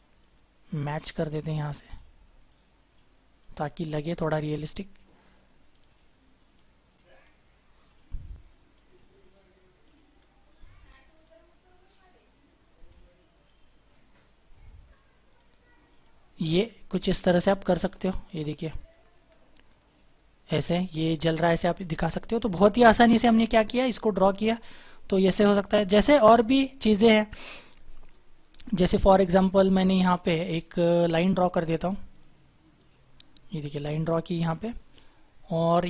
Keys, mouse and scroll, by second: 10.1-14.6 scroll down 1, 14.6 scroll up 1, 16.4-18.5 scroll down 1, 18.5 double click, 18.9-19.7 scroll down 1, 19.7-20.0 scroll up 1, 21.2-21.8 scroll down 1, 21.8 scroll down 1, 21.8-22.8 scroll up 1, 22.8-24.3 scroll down 1.